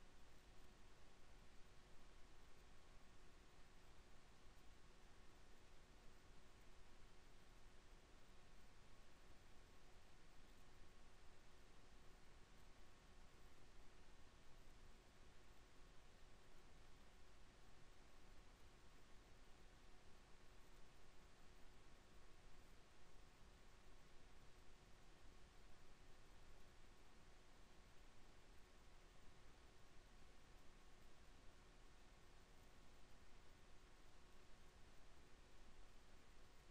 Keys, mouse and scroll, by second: 7.1 n, 13.4-17.2 middle drag, 22.6 Tab, 24.4 ctrl+r, 27.1 ctrl+r, 29.4 Tab, 30.2 Tab, 30.7 ctrl+r, 33.8 ctrl+r, 36.2 ctrl+r.